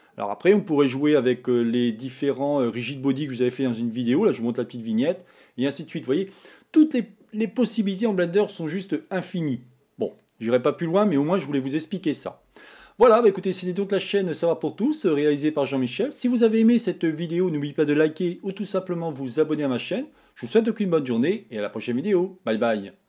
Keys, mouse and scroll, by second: 1.7 scroll up 1, 1.8-4.4 scroll down 2, 4.4-4.9 scroll down 1.